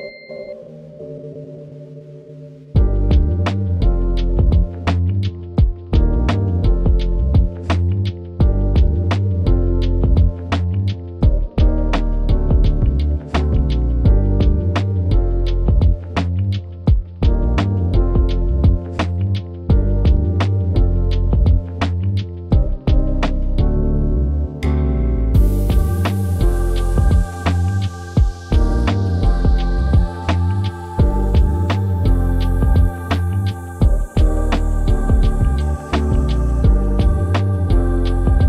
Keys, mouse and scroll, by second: 22.6 click, 28.0-32.1 drag, 34.2-35.0 typing, 36.8 scroll up 1, 37.7-38.4 drag.